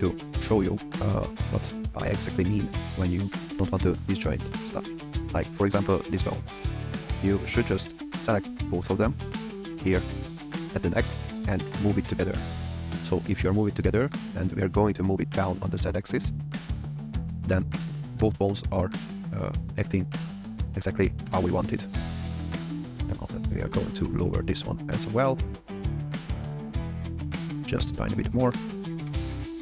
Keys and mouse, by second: 4.5 click, 4.9 g, 6.8 click, 7.7 shift+click, 8.8 shift+click, 10.3 shift+click, 11.2 g, 13.3 g, 13.6 z, 22.9 g, 23.2 z, 24.8 click, 27.2 g, 27.4 z, 28.2 click, 29.5 KP_3.